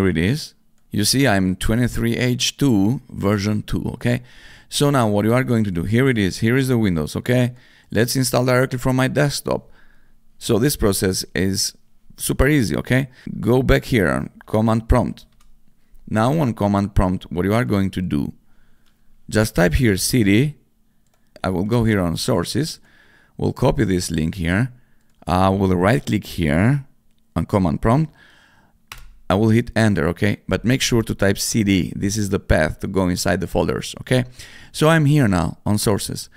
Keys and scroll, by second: 14.3 c, 14.9 o, 15.3 Return, 15.3 c, 19.3-20.1 typing, 28.9 Return.